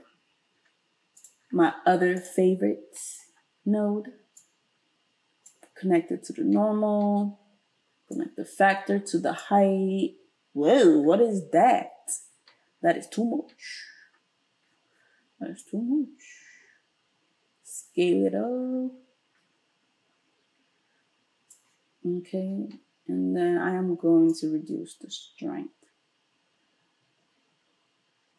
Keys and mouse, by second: 2.2-4.4 middle drag, 4.4-28.3 drag.